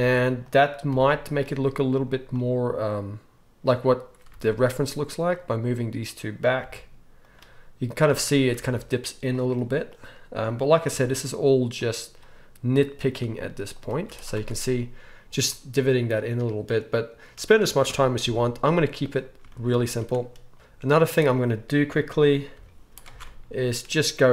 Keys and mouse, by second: 2.4-4.8 middle drag, 4.3 ctrl+r, 4.8 right click, 5.5-7.3 middle drag, 6.6 g, 7.3-15.6 right drag, 8.5 ctrl+r, 9.8 click, 10.9 g, 12.2 click, 13.2 g, 13.9 z, 14.3 Tab, 15.6-18.4 drag, 18.2 KP_1, 18.4-21.2 right drag, 19.7 z, 20.5 z, 21.2 middle click, 21.3-22.9 right drag, 22.5 h, 22.9 middle click, 23.1 Tab, 23.8 click.